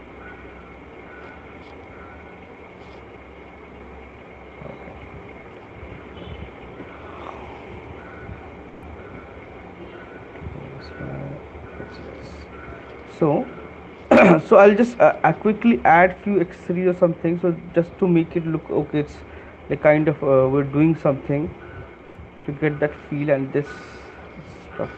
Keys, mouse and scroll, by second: 0.3 click, 1.2 click, 5.7 alt+click, 5.8 right click, 7.5 click, 8.3 Down, 8.9 Right, 9.1 Right, 9.5 Right, 9.7 Right, 10.1 Left, 10.4 Left, 10.6 Left, 10.8 Left, 11.0 Left, 11.6 Right, 13.7 Right, 13.7 click, 16.5 alt+click, 17.1 right click, 17.9 alt+click, 18.8 alt+click, 20.0 alt+click, 21.2 alt+click, 22.4 right click, 24.8 [.